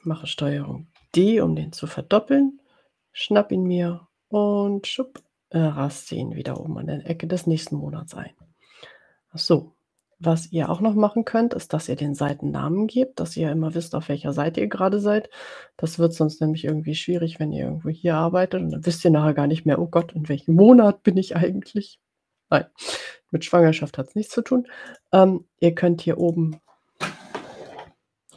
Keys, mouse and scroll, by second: 1.2 ctrl+d, 3.4-5.5 drag, 6.5 click, 10.7 click, 16.0 click, 17.2-18.8 drag, 19.1-20.2 drag, 26.2 click.